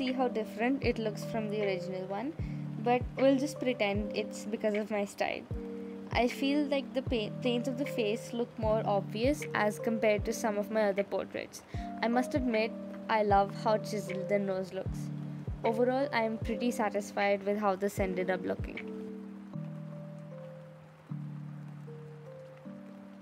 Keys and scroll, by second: 6.3 space, 10.4 space, 12.2 space, 17.2 space, 18.2 space, 21.0 ctrl+z, 21.7 ctrl+z, 22.3 space.